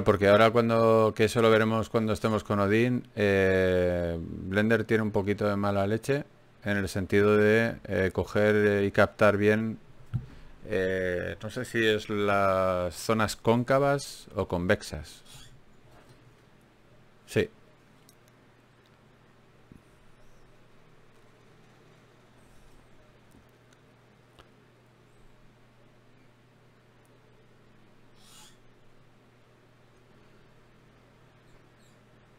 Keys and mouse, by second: 0.7 ctrl+Tab, 2.7 f, 4.3 ctrl+z, 7.1 ctrl+r, 9.5 g, 12.5 ctrl+Tab, 13.6 click, 14.0-15.4 right drag, 14.6 click, 16.0 ctrl+Tab, 16.0 click, 16.8 f, 17.4 ctrl+Tab, 19.0 f, 19.2 f, 19.6 f, 22.4-25.7 right drag.